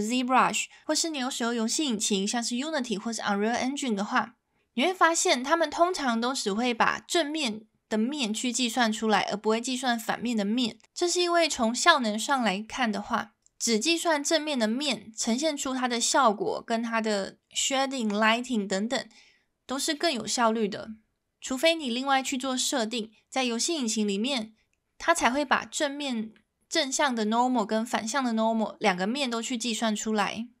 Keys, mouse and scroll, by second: 14.3 middle drag, 26.1 middle drag.